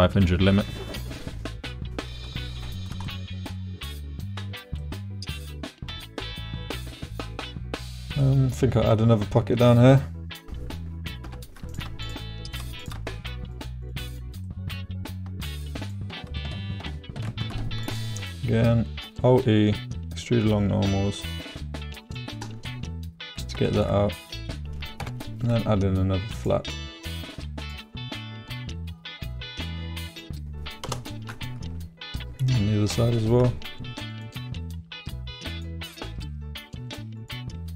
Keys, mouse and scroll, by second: 2.6 shift+middle click, 3.0 middle click, 3.8 middle click, 4.8 middle click, 5.9 shift+middle click, 6.6 middle click, 7.4 middle click, 8.2 middle click, 11.8 shift+right click, 12.1 shift+middle click, 12.1 shift+right click, 12.8 middle click, 12.9 shift+right click, 13.4 shift+middle click, 13.5 shift+right click, 14.1 shift+middle click, 14.2 shift+right click, 14.4 middle click, 15.8 shift+middle click, 17.4 alt+e, 22.0 middle click, 22.7 middle click, 23.6 shift+click, 24.2 click, 25.0 k, 27.9-30.9 drag, 31.3 click, 32.9 k.